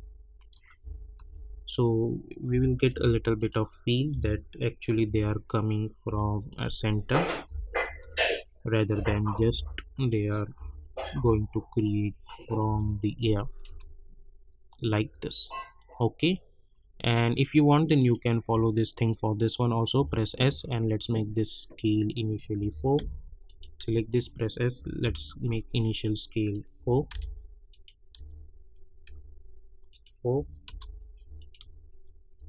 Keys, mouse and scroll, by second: 0.8 [, 1.6 click, 2.5 [, 2.9 Page_Down, 3.3 click, 4.1 [, 4.5 scroll up 1, 5.0 Page_Down, 6.4 click, 7.4 [, 7.8 Page_Down, 8.3 click, 8.9 [, 9.3 Page_Down, 9.9 click, 10.5 [, 10.9 Page_Down, 12.4 click, 12.6 [, 13.2 click, 13.6 space, 15.7 click, 16.7 scroll down 1, 17.9 click, 20.0 s, 20.2 scroll down 1, 22.0 click, 22.9 Return, 23.4 click, 23.7 s, 25.0 k, 26.3 click, 27.1 Return, 27.7 click, 28.1-29.5 typing, 29.9 click, 30.6 Return, 31.3 click, 31.6-32.4 typing.